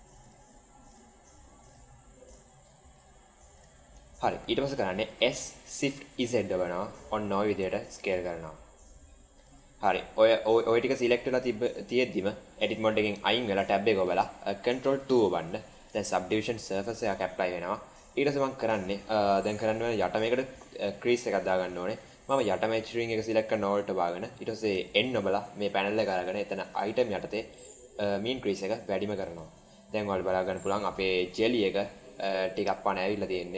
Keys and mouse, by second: 2.8 alt+shift+click, 3.4 alt+shift+click, 5.1 s, 12.7 Tab, 15.1 ctrl+2, 16.6-17.9 middle drag, 17.9 Tab, 19.3 middle click, 24.8 n, 26.6 click, 27.6-28.7 drag, 29.2 Tab, 29.9-31.5 middle drag, 32.0-32.8 middle drag, 33.3-33.5 right drag.